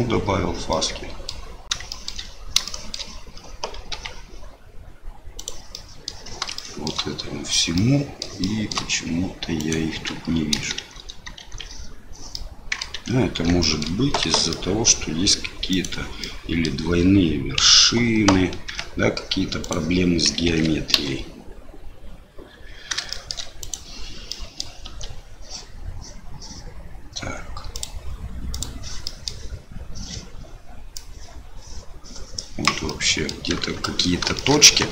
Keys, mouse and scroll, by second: 0.7 middle click, 1.9 shift+middle click, 2.6 shift+middle click, 3.9 g, 5.7 middle click, 6.5 shift+middle click, 7.7 middle click, 8.4 shift+middle click, 9.6 click, 10.7 shift+z, 11.4 shift+z, 12.3 middle click, 12.9 Tab, 13.6 shift+middle click, 14.2 a, 14.5 middle click, 15.7 click, 16.2 middle click, 17.6 l, 18.7 g, 20.4 alt+a, 20.9 l, 23.3 shift+click, 24.3 middle click, 24.8 Tab, 27.7 click, 29.0 middle click, 31.0-32.6 drag, 32.8 middle click, 33.8 middle click, 34.3 shift+middle click, 34.7 Tab.